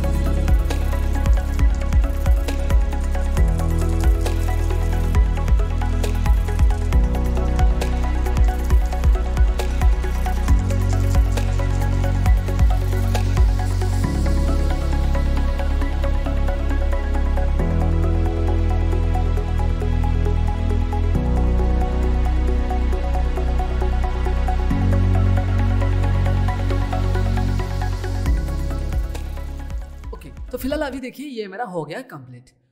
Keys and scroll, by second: 12.5 ctrl+z, 22.8 ctrl+z.